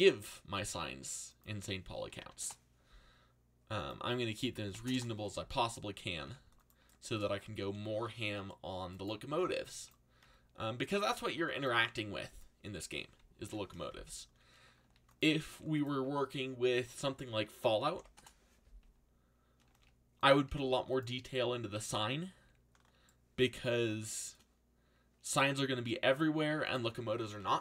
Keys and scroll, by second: 1.8-2.8 typing, 4.3-7.6 typing, 9.0-11.1 typing, 13.4 ctrl+l, 14.8 shift+d, 15.5 r, 17.4-21.0 typing, 22.3 z.